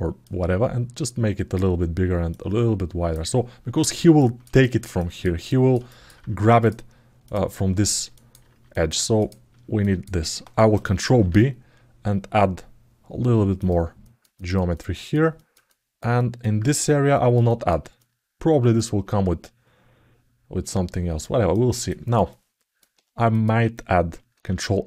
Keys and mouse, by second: 0.0-1.4 drag, 2.1 right click, 3.9 alt+shift+middle click, 4.4 ctrl+alt+middle click, 4.7 alt+shift+middle click, 5.2 alt+middle click, 5.6 alt+shift+middle click, 6.3 click, 7.9 alt+middle click, 8.5 alt+middle click, 9.5 alt+middle click, 10.8 ctrl+b, 13.8 alt+middle click, 14.1 ctrl+alt+middle click, 14.5 alt+shift+middle click, 15.2 alt+middle click, 15.5 alt+shift+middle click, 15.9 alt+middle click, 16.9 alt+shift+middle click, 17.8 alt+middle click, 21.3 ctrl+alt+middle click, 22.1 alt+middle click, 23.1 click, 24.2 ctrl+r.